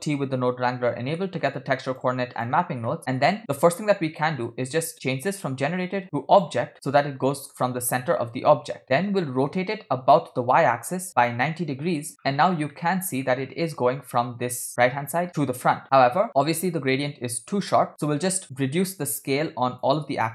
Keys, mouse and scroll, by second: 0.3 ctrl+t, 1.2 middle click, 1.6 scroll up 2, 2.4 click, 3.1 middle click, 3.6 middle click, 3.6 scroll up 2, 6.2 click, 6.7 scroll down 2, 6.8-7.6 middle drag, 9.6-12.1 drag, 13.0 middle click, 16.2 middle click, 16.3 scroll up 3, 17.8 middle click, 17.9-19.9 shift+drag, 20.2 click.